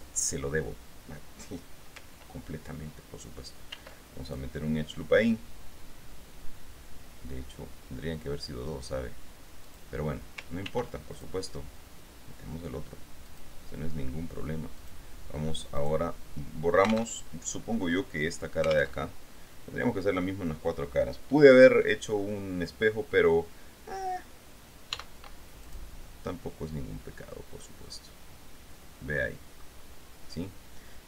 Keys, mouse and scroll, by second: 0.1 alt+Tab, 3.9 ctrl+r, 4.4 ctrl+click, 9.8 click, 10.8 ctrl+r, 11.3 ctrl+click, 13.4 click, 16.1 right click, 17.4 alt+Tab, 19.2 alt+Tab, 25.1 x, 25.8 click, 26.6-29.6 drag.